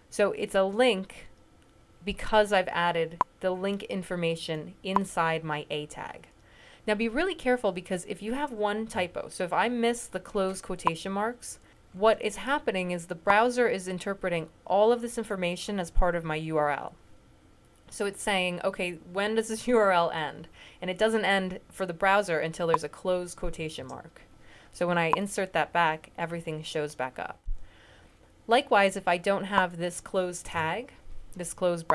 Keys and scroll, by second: 23.6 ".